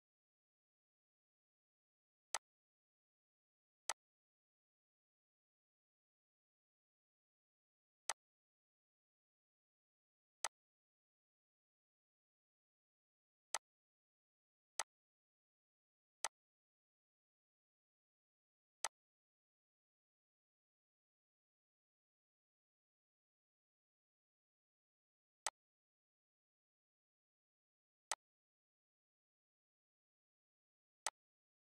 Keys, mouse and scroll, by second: 2.3 click, 8.0-18.3 drag, 18.8 click, 18.8-25.0 drag, 25.5 click, 27.8 typing, 28.1-29.7 drag, 29.7 right click, 31.0-31.6 drag.